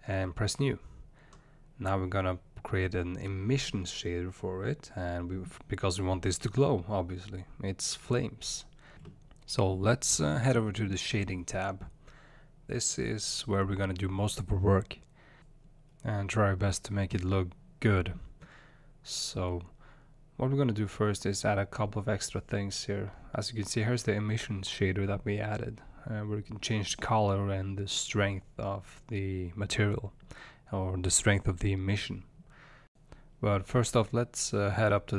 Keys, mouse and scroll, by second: 2.3-6.6 drag, 6.8-9.5 drag, 10.7 space, 12.3 click, 13.6 scroll up 1, 14.2-25.4 middle drag, 25.4 click, 31.1 click.